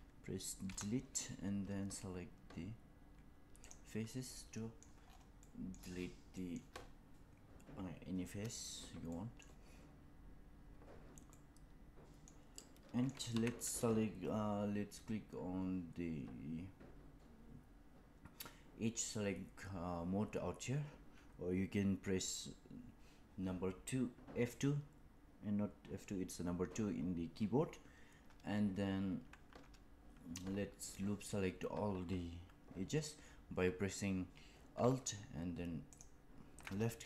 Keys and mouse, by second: 0.5 Delete, 4.3 middle click, 5.3 middle click, 6.3 middle click, 9.0 middle click, 11.2 middle click, 12.5 middle click, 13.2 2.